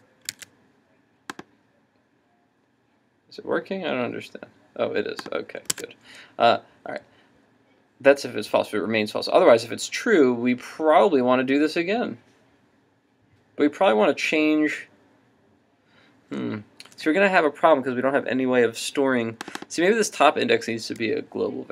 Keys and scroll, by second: 0.5 super+Tab, 5.7 super+Tab.